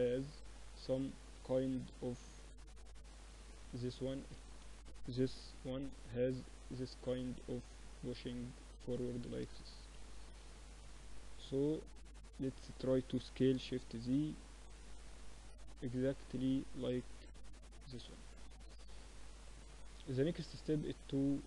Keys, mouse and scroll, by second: 1.3 KP_1, 1.8 KP_3, 2.3 Tab, 2.8 middle click, 3.2 Tab, 3.2-5.0 drag, 3.5 Tab, 4.1 z, 4.4 a, 5.2 b, 6.2-8.2 drag, 9.4 Tab, 9.7 z, 10.0-11.2 middle drag, 13.0 s, 16.6 z, 17.4-20.2 middle drag, 17.4 z.